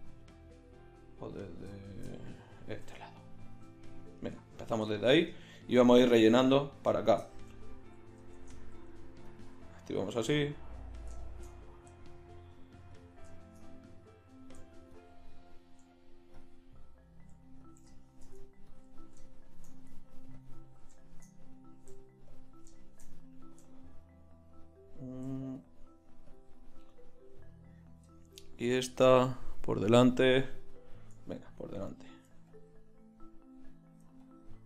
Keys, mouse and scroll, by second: 1.3-2.7 middle drag, 2.7 g, 8.4 shift+Tab, 13.4 middle click, 13.7 middle click, 14.0 click, 14.9-22.2 drag, 22.3-25.0 drag, 25.6-28.1 middle drag, 31.4 click.